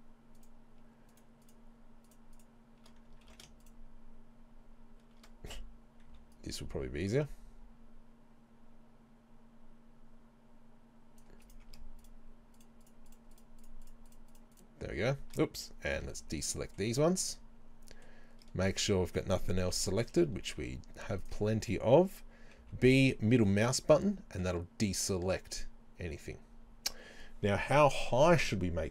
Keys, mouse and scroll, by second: 2.1 shift+right click, 2.4 shift+right click, 3.2 ctrl+z, 3.6 shift+right click, 6.1 c, 11.5 right click, 12.0 shift+right click, 13.1 shift+right click, 13.6 shift+right click, 14.1 shift+right click, 14.3 shift+right click, 14.6 shift+right click, 16.0 b, 17.2-28.9 middle drag, 19.7 KP_3, 20.1 KP_1, 20.6 z, 22.6 b.